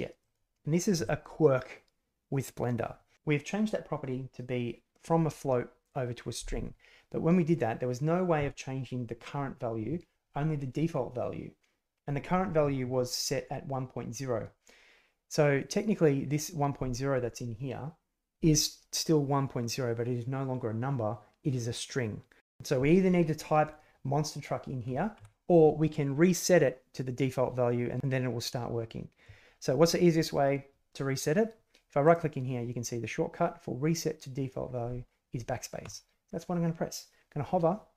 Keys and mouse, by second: 23.6 click, 35.8 drag.